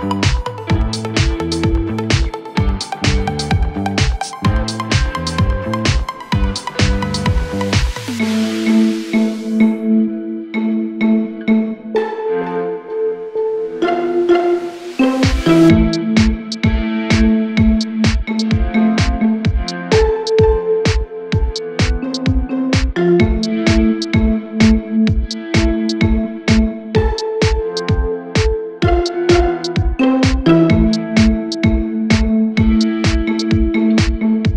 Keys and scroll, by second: 6.1-7.0 typing, 9.9 Delete, 13.1 Delete, 15.8 F4.